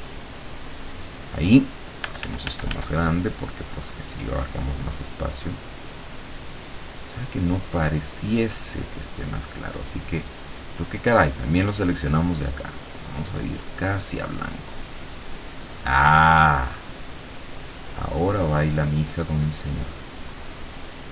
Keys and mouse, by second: 0.9 click, 2.0 f, 3.0-9.0 drag, 10.2 click, 10.8 click, 11.3 click, 12.6-13.8 drag, 14.9-20.3 drag, 20.6-21.1 drag.